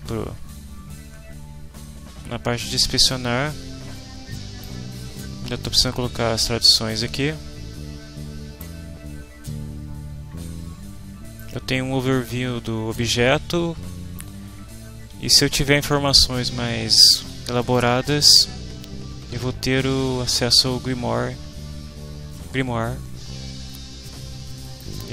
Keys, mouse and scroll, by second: 3.0 click, 4.6-8.8 right drag, 11.4-14.4 right drag, 17.6 click, 24.6 click.